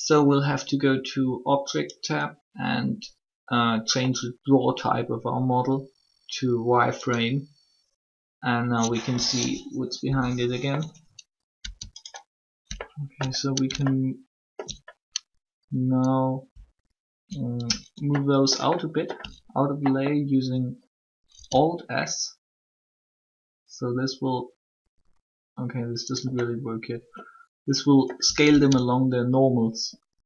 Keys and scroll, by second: 9.8 1.